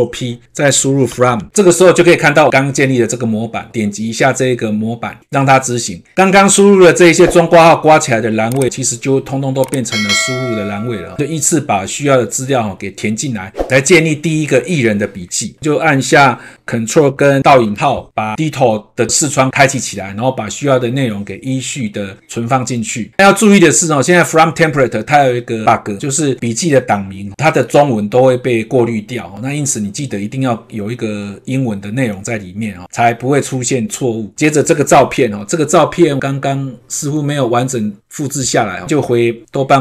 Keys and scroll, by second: 17.4 ctrl+`, 23.1 ctrl+v, 34.9 ctrl+`.